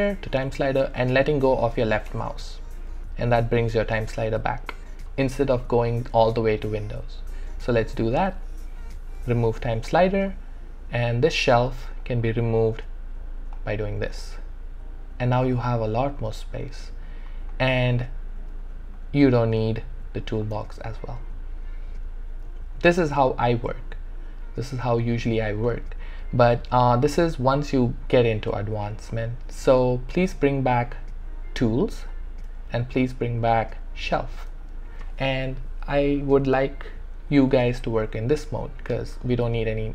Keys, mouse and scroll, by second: 2.1 space, 7.5 space, 7.7 click, 11.7 space, 12.0 click, 12.2 space, 13.0 space, 18.5 space, 20.5 space, 30.3 space, 30.6 click, 33.3 click, 33.4 space.